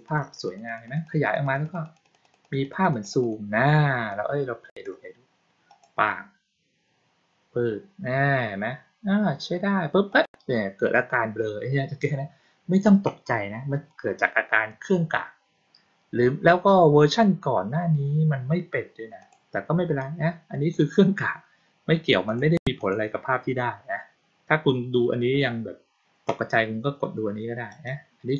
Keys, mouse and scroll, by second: 0.0 click, 0.4 click, 0.6 click, 0.8 click, 0.9 click, 1.1 click, 1.3 click, 1.5 click, 1.7 click, 1.9 click, 2.1 click, 2.3 click, 2.5 click, 2.7 click, 2.9 click, 3.1 click, 4.0-4.7 drag, 5.6 click, 10.0 click, 19.1 click, 19.9-20.6 drag, 22.2 click, 22.7 click, 27.6 click.